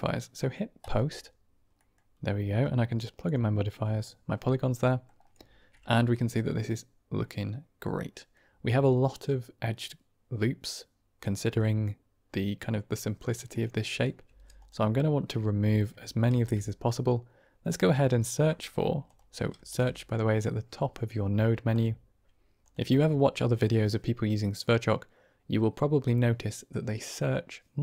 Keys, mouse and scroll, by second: 0.7 click, 1.7 middle click, 2.5-3.2 drag, 3.8 middle click, 4.7 middle drag, 6.0 middle drag, 7.1-8.2 middle drag, 11.5-12.4 middle drag, 12.5 click, 13.7 drag, 14.1 g, 16.2 shift+a, 19.5 shift+a.